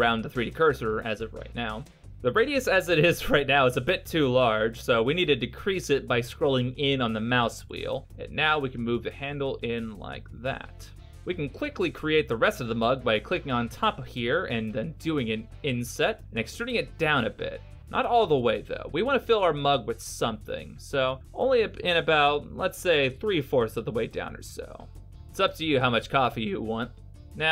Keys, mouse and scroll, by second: 2.4 g, 3.7-4.2 scroll up 3, 4.2-4.6 scroll down 2, 4.6-4.9 scroll down 2, 4.6 g, 11.3 middle click, 12.7 right click, 15.3 KP_Decimal, 17.2 i, 20.7 e, 23.4 middle click, 27.0-27.5 scroll down 5.